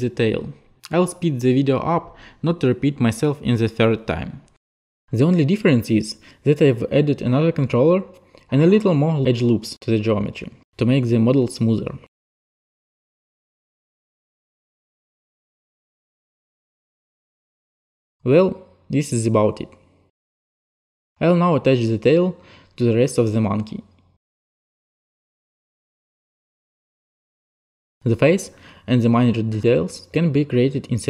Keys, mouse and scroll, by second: 0.1 click, 0.4 click, 0.5 click, 0.8 click, 1.1 click, 1.2 click, 1.6 click, 1.8 click, 2.2 click, 2.3 click, 2.8 click, 3.1 click, 3.5 click, 3.7 click, 4.1 click, 4.2 click, 4.4 alt+middle click, 4.7 click, 5.1 click, 5.2 click, 5.6 click, 5.9 click, 6.8 click, 7.2-9.0 typing, 7.7 shift+click, 8.2 shift+click, 9.0 shift+click, 9.2 shift+click, 9.5 shift+click, 9.8 shift+click, 10.0 click, 10.4 click, 11.1 shift+click, 11.7 click, 12.1 click, 12.4 alt+click, 12.9 click, 13.0 ctrl+click, 13.3 middle click, 13.7 click, 13.9 click, 14.0 click, 14.3 e, 14.5 click, 14.6 click, 14.7 alt+click, 14.9 click, 15.0 click, 15.3 click, 15.4 click, 15.5 click, 15.7 click, 15.9 click, 16.0 alt+click, 16.2 click, 16.9 click, 17.1 click, 17.2 right click, 17.6 right click, 18.2 right click, 18.5 right click, 19.0 shift+click, 19.1 click, 19.4 alt+click, 19.6 click, 19.7 click, 20.7 click, 22.6 click, 24.2 alt+click, 24.5 click, 24.8 click, 25.1 click, 25.3 alt+click, 25.6 click, 25.7 alt+click, 25.8 alt+click, 26.4 click, 26.4 click, 27.3 alt+click, 27.4 alt+click, 30.8 click.